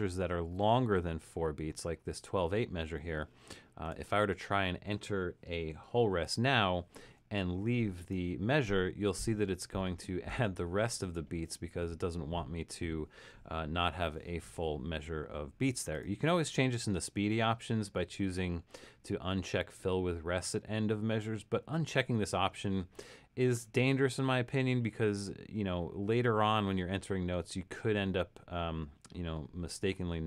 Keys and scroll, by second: 6.6 7.